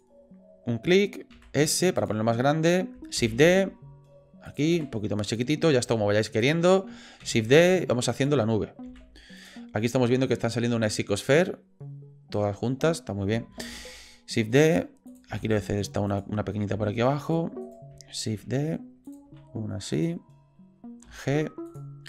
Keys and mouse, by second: 1.3 s, 3.2 shift+d, 4.7 s, 5.8 g, 7.2 shift+d, 8.9 s, 13.7 shift+d, 15.3 s, 16.7 g, 18.3 shift+d, 19.3 s, 21.0 g.